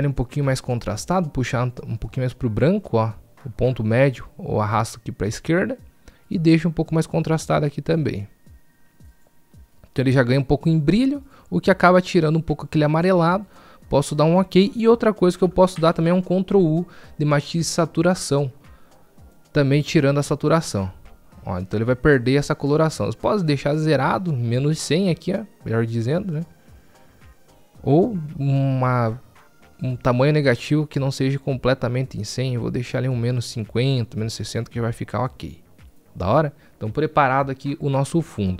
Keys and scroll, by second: 16.1 ctrl+u, 19.7 ctrl+u.